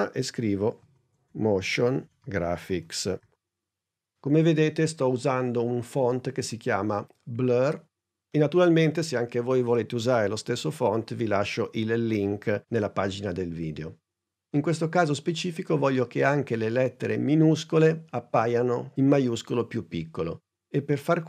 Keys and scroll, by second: 0.6-3.2 typing.